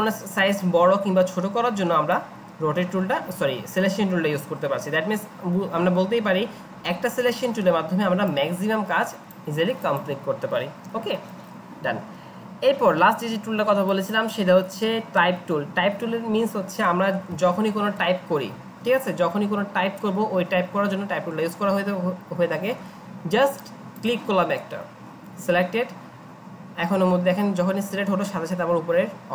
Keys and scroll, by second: 17.3 ctrl+a, 18.0 Delete.